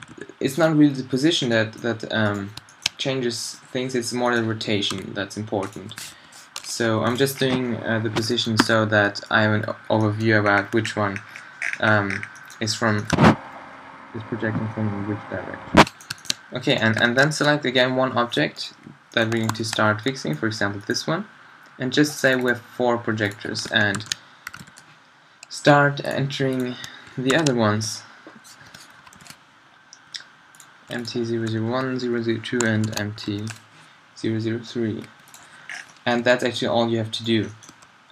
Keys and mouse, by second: 2.2-4.9 drag, 4.9 r, 5.8 g, 6.8 g, 8.6 a, 15.7 middle click, 16.0-22.2 middle drag, 35.7-36.0 middle drag, 36.2 g, 37.5 drag, 37.7 g.